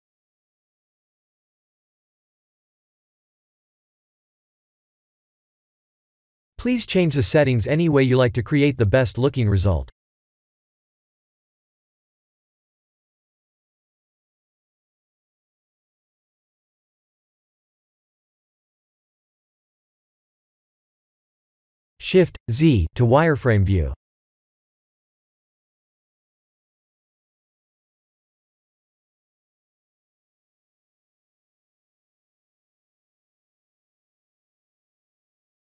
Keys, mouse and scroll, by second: 7.4-11.3 drag, 12.2-17.4 drag, 19.9 click, 25.6 shift+z, 27.5 shift+middle click, 30.6-32.5 drag, 34.2-35.8 drag.